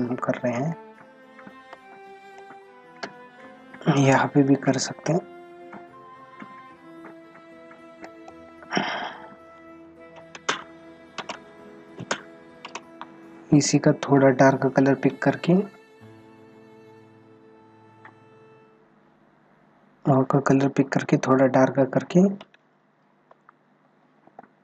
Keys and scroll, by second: 1.7 space.